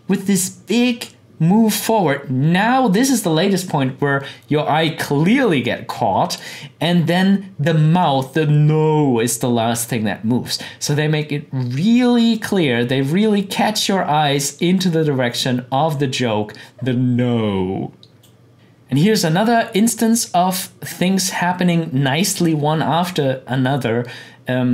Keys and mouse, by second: 6.4-16.3 drag, 18.5 click, 22.3-24.7 drag.